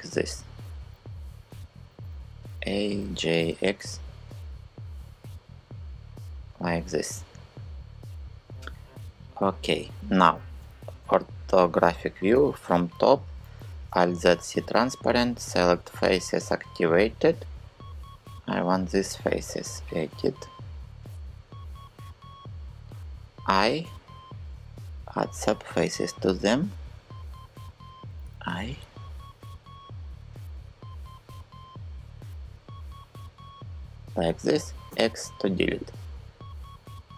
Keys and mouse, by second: 1.8 a, 2.6 g, 3.1 x, 10.2 KP_5, 12.0 KP_7, 13.7 alt+z, 17.5-18.5 drag, 23.6 i, 27.2 Escape, 27.9 i, 33.5 click, 34.5 x.